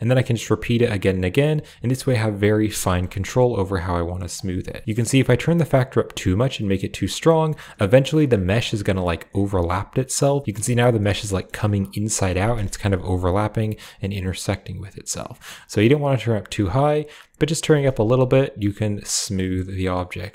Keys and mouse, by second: 0.2 click, 0.5 click, 0.7 click, 0.8 click, 1.0 click, 1.2 click, 1.3 click, 1.5 click, 1.7 click, 1.8 click, 2.0 click, 2.1 click, 2.3 click, 2.5 click, 2.9-4.1 drag, 2.9-4.1 right drag, 2.9 middle click, 4.1 middle click, 4.9-10.4 drag, 10.9-11.3 middle drag, 12.8-17.5 shift+drag, 17.7-18.5 drag, 17.7-18.5 right drag, 18.9-19.4 drag, 18.9-19.4 right drag, 19.8-20.3 drag, 19.8-20.3 right drag.